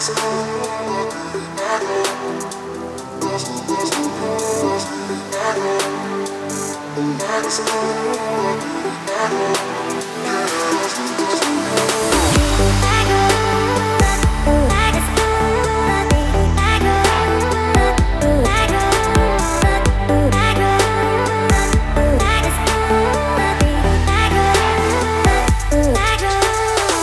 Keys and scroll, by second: 17.2 ctrl+t.